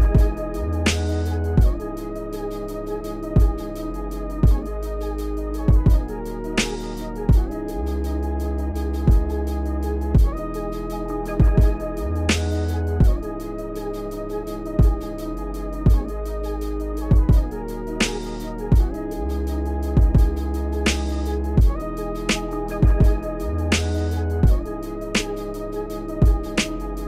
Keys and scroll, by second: 6.6 Return, 7.4-8.7 typing, 10.8-12.9 typing, 13.8 Tab, 14.4-17.1 typing, 20.7-25.4 typing.